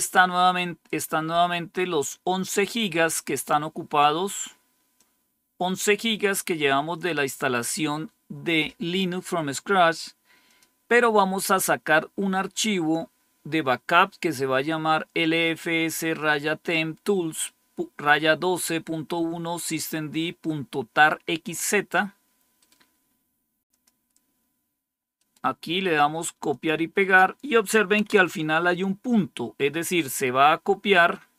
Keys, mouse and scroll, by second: 1.6-3.0 drag, 3.2 click, 4.9-7.7 drag, 10.4 click, 22.5 right click, 23.6 click, 25.0 right click, 25.6 right click, 26.3-27.8 drag, 28.0 Tab, 28.1 Right.